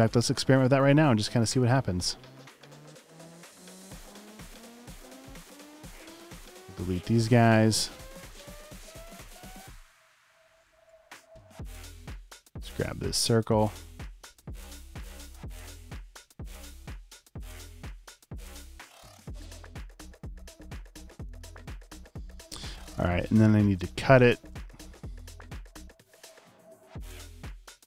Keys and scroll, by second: 0.0 space, 3.6 space, 4.3 space, 4.9 super+space, 8.7 BackSpace, 16.8 super+c, 17.2 super+f, 21.2 space, 21.7 super+space, 22.2 space.